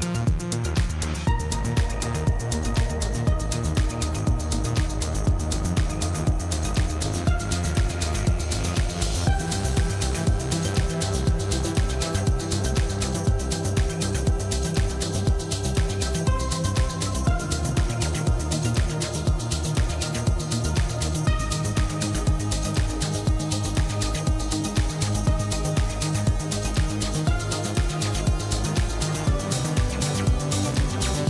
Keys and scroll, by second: 2.6 ctrl+z, 5.9 a, 6.3 u, 6.5 ctrl+z, 7.5-10.3 typing, 13.1 Tab, 13.4 Tab, 13.6 s, 14.2 g, 15.2 Tab, 16.2 Tab, 17.5-18.8 typing, 18.1 Return, 18.9 Return, 19.5 Tab, 21.4 a, 21.7 Return, 21.8 Tab, 22.0 2, 22.3 ctrl+b, 22.4 ., 22.5 Return, 23.5 3, 24.3 u, 25.3 x, 25.5 ctrl+v, 30.2 e, 30.5 7, 30.7 BackSpace, 30.8 4, 30.9 Return.